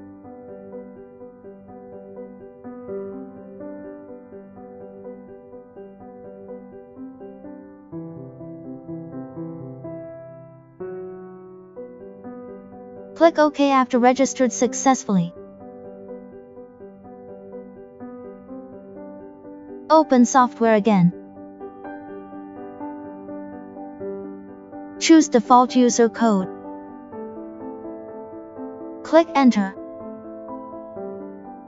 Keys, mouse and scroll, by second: 12.0 click, 16.8 click, 20.8 right click, 22.2 click, 22.4 right click, 23.7 click, 26.8 click, 29.4 click, 31.3 click.